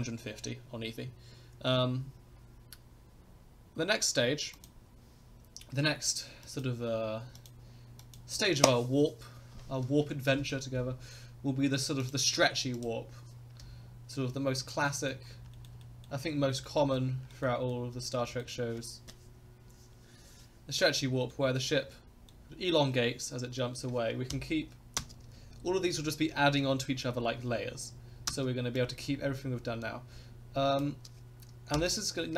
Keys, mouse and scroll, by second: 4.5 click, 6.4 click, 7.3 click, 8.0 click, 12.0 click, 12.7 click, 13.5 KP_0, 14.4 scroll down 2, 14.8 middle click, 15.2 scroll up 2, 15.5 shift+middle click, 15.8 shift+middle click, 15.9 scroll down 1, 16.5 shift+middle click, 16.8 middle click, 17.0 scroll down 1, 17.3 shift+middle click, 17.5 middle click, 17.9-18.3 scroll down 1, 18.3 middle click, 21.3-22.3 middle drag, 24.3 KP_0, 25.0 space, 28.3 space, 28.8-30.8 drag, 31.7 KP_0.